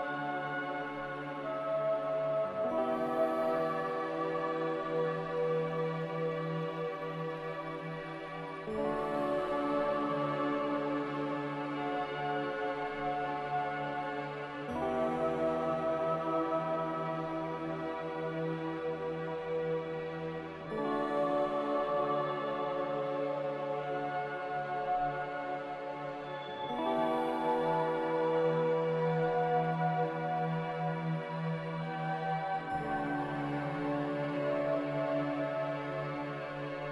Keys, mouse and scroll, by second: 1.6-2.9 typing, 5.0 m, 7.8 Escape, 17.8 a, 19.1 f, 21.0 m, 26.0 Escape.